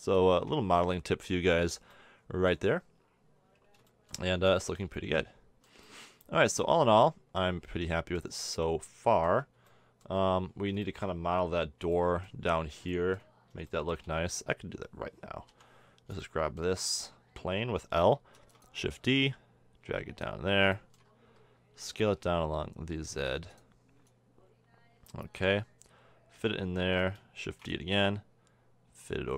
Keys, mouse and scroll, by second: 0.2 a, 0.3 Tab, 0.8-1.2 middle drag, 1.8 middle click, 5.1-8.0 middle drag, 8.6-14.3 middle drag, 14.3 Tab, 15.5 l, 18.4 shift+d, 19.1-20.7 drag, 20.8 middle click, 20.9 click, 21.7 s, 22.6 click, 27.4 shift+d.